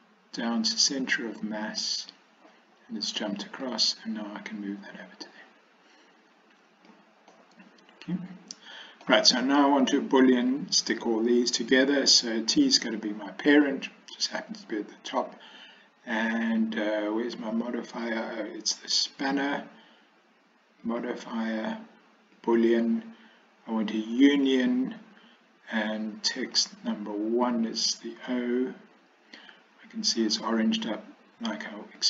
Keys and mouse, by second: 3.7-7.0 drag, 7.4-9.1 middle drag, 19.2 click, 20.9-22.7 drag, 24.3 click, 26.5-28.1 drag.